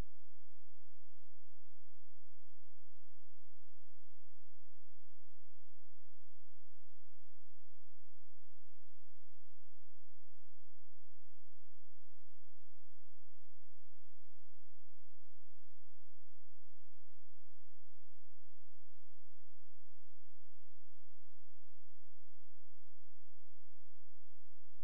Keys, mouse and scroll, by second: 0.4 shift+click, 2.0 right click, 3.8-4.5 scroll down 1, 4.5 click, 5.1-5.7 scroll up 1, 6.4 click, 9.3 shift+click, 11.4 shift+click, 14.2 shift+click, 15.4-16.8 scroll down 1, 16.8 click.